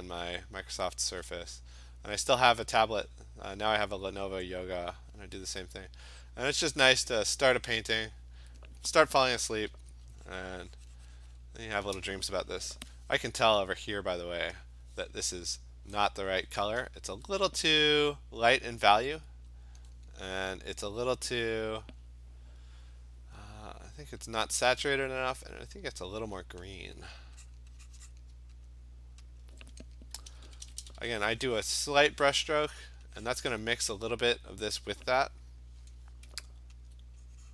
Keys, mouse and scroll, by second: 0.3 click, 0.8 click, 1.0 [, 1.6 click, 2.0 click, 2.4 click, 2.7 click, 3.2 click, 4.5 click, 5.6 click, 6.0 click, 6.8 click, 7.5 click, 7.6 click, 8.1 click, 9.3 ], 9.5 ], 9.7 ], 9.9 ], 10.4 click, 11.4 click, 19.7 click, 21.9 click, 26.1 click, 26.8 click, 27.5 click, 28.1 click, 28.7 alt+click, 29.2 alt+click, 29.4 click, 29.5 alt+click, 30.3-31.0 typing, 31.7 click, 32.0 click, 32.9 click, 33.3 click, 34.4 alt+click, 36.9 alt+click, 37.0 alt+click.